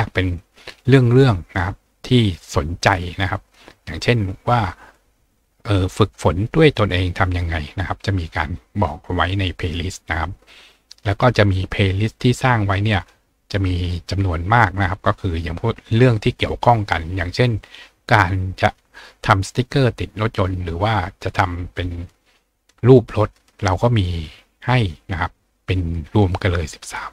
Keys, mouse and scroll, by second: 0.1-0.7 scroll down 2, 0.9-2.2 scroll down 3, 2.2 scroll down 1, 2.9 scroll down 1, 4.5 scroll down 1, 8.4 scroll down 1, 8.8-9.5 scroll up 2, 9.7 scroll up 2, 12.9 click, 15.2-16.0 scroll down 2, 16.0-16.4 scroll down 1.